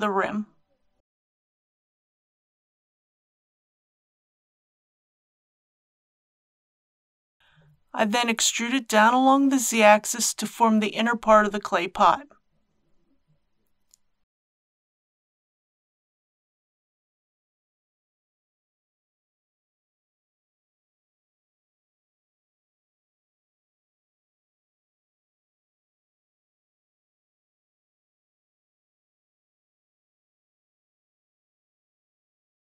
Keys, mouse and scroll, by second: 4.3 click, 7.5 KP_1, 9.7 click, 14.8 e, 15.8 z, 16.7 z, 21.0 click, 21.8 e, 23.5 click, 24.9 click, 25.1-26.5 typing, 27.9-28.2 typing, 29.4 typing, 31.0 click, 31.2 click.